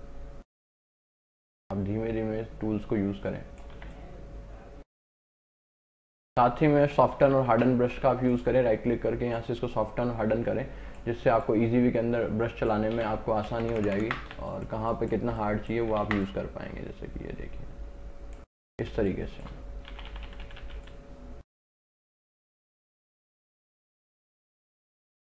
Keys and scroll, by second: 3.8 x, 7.2 [, 8.0 ], 13.0 ctrl+alt+z, 13.7 ctrl+KP_Add, 14.4 space, 16.1 ctrl+alt+z, 19.0 space, 20.0 [, 25.1 [.